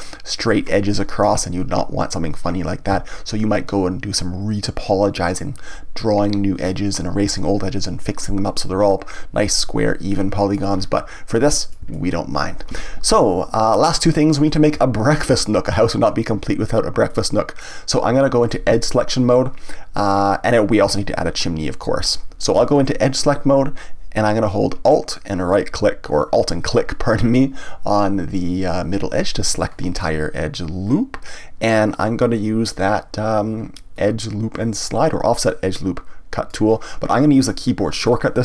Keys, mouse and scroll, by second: 10.1 middle click, 10.7 scroll down 1, 11.4-20.1 middle drag, 25.5 alt+click, 30.0-33.0 middle drag, 33.9-36.9 drag, 38.0 click.